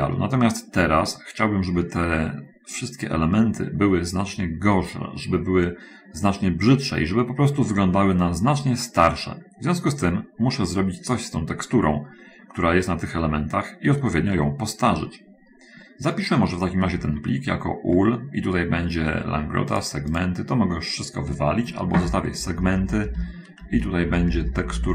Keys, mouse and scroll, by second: 0.2-2.2 middle drag, 8.8 scroll up 1, 10.1 scroll down 1, 13.9-14.4 scroll down 1, 14.7-15.4 shift+scroll up 1, 15.4 shift+middle click, 17.0 F2, 19.9 click, 20.6 click, 22.5 Right, 22.8 Right.